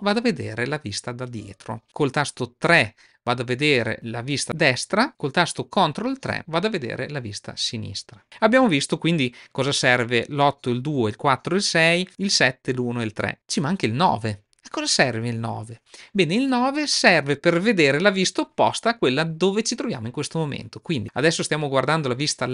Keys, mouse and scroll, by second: 2.5 KP_5, 6.1 ctrl+KP_3.